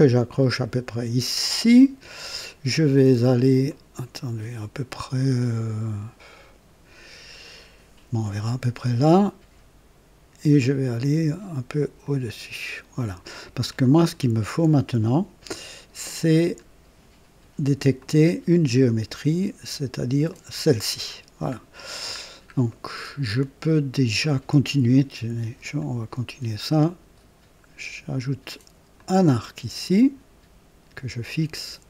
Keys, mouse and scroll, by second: 1.4 click, 3.7 right click, 8.2 click, 12.0 click, 13.0 right click, 13.7 scroll up 2, 16.3 scroll up 2, 18.0 click, 20.3 click, 21.2-21.5 scroll down 1, 22.3 scroll down 1, 22.7 right click, 24.2 right click, 25.8 click, 28.9 click.